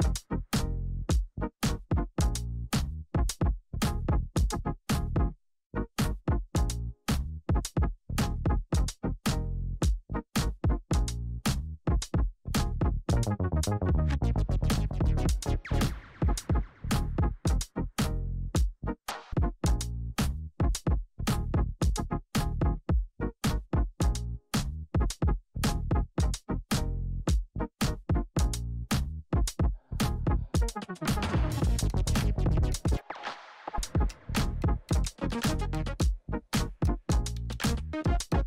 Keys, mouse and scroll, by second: 0.6-4.1 typing, 4.8 click, 10.3 click, 12.4 ctrl+y, 13.4-14.3 typing, 14.6 Return, 16.1 click, 18.6 ctrl+n, 20.6-23.8 typing, 24.9 click, 29.4 click, 33.4-34.0 scroll down 1, 34.0-35.2 scroll down 1, 35.9-38.4 drag.